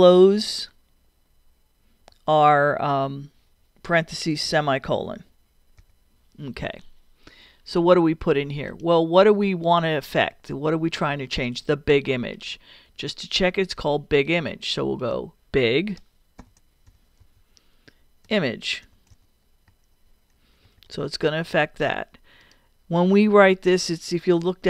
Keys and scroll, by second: 0.2 shift+0, 5.8 ;, 16.2-19.7 typing.